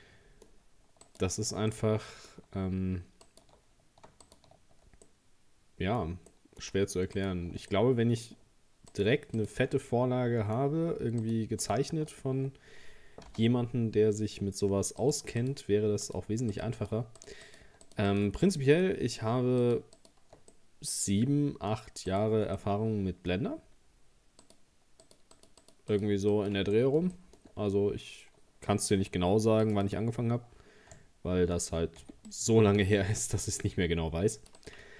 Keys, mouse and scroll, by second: 1.1 alt+shift+right click, 1.7-3.3 middle drag, 3.3 alt+shift+right click, 4.3 alt+shift+right click, 5.1-7.2 middle drag, 7.2 alt+shift+right click, 7.7-8.9 middle drag, 8.9 alt+shift+right click, 9.4 alt+shift+right click, 9.8-11.2 middle drag, 11.2 alt+shift+right click, 11.6 alt+shift+right click, 13.3 ctrl+z, 15.0 shift+right click, 15.4 shift+right click, 16.1 shift+right click, 16.5 shift+right click, 16.8 shift+right click, 17.2 shift+right click, 17.5 shift+right click, 17.9 shift+right click, 18.1 shift+right click, 18.5-19.6 middle drag, 19.6 shift+right click, 20.0 shift+right click, 20.5-22.1 middle drag, 22.1 shift+right click, 22.6-24.4 middle drag, 24.4 shift+right click, 25.0 shift+right click, 25.4 shift+right click, 25.6 shift+right click, 25.9 shift+right click, 26.3 shift+right click, 26.8 middle click, 27.5-28.6 scroll up 1, 29.6-32.0 drag, 32.0 c.